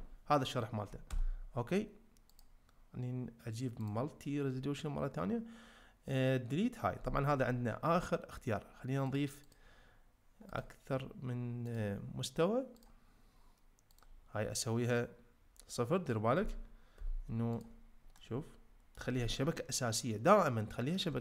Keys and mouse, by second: 1.1 Tab, 2.3-3.9 drag, 9.7-10.7 drag, 13.1-17.6 drag, 18.2-18.9 middle drag.